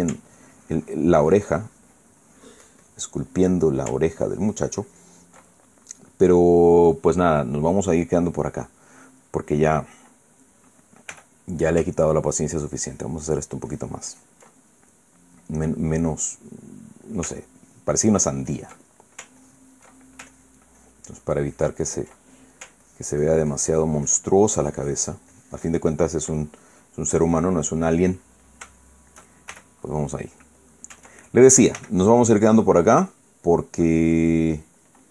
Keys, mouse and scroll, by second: 0.5 ctrl+middle click, 1.0-4.7 ctrl+drag, 4.2 ctrl+middle click, 4.8-11.3 ctrl+drag, 6.0-8.8 ctrl+middle drag, 11.8 f, 12.3 ctrl+click, 12.9 ctrl+click, 13.5 ctrl+click, 14.0 ctrl+click, 15.2-18.0 ctrl+middle drag, 18.4-19.5 ctrl+drag, 19.5 ctrl+middle click, 20.1 ctrl+click, 20.6 ctrl+middle click, 21.0 ctrl+click, 21.5-22.5 ctrl+drag, 22.6 ctrl+click, 22.9 ctrl+middle click, 23.6-25.1 ctrl+drag, 25.2 ctrl+click, 26.5-27.1 ctrl+drag, 27.1-30.0 ctrl+middle drag, 30.2 shift+f, 31.3 click, 32.5 f, 33.0 click, 33.5 middle click, 34.2 middle click.